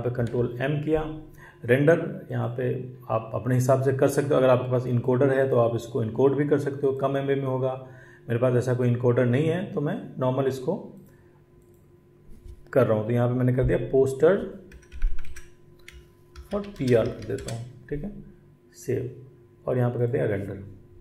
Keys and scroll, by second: 0.0 ctrl+m, 14.9-17.5 typing.